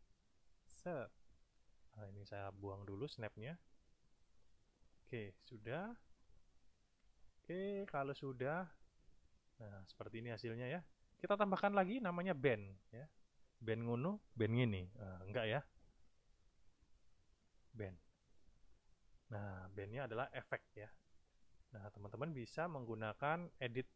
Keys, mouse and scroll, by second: 2.1 click, 3.4 click, 4.4-5.8 drag, 6.8 click, 8.6 click, 9.8 click, 11.6 click, 16.4-16.7 scroll up 1, 17.2-17.8 scroll up 2, 18.8 click, 23.5 click.